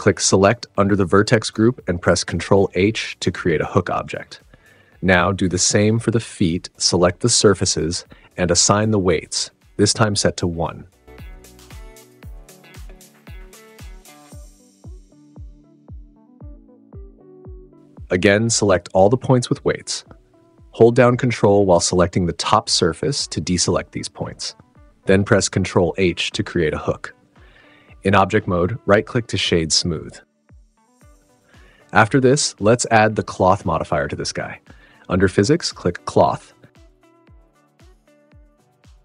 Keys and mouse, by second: 0.9 click, 1.9 ctrl+h, 5.1 click, 5.7 click, 6.5 click, 6.7 click, 7.9-8.7 shift+drag, 9.0-9.3 shift+drag, 10.3 click, 10.8 click, 11.5 super+=, 12.0 super+=, 12.4 click, 13.7 click, 14.4 click, 15.1 super+=, 15.2 super+=, 15.7 click, 17.0 click, 18.2 click, 19.0 click, 21.4 click, 22.1 ctrl+click, 25.8 ctrl+h, 26.9 Tab, 27.6 click, 27.9 super+s, 28.6-29.1 drag, 29.6 super+z, 29.8-31.0 drag, 32.0 click, 35.1 right click, 36.3 right click.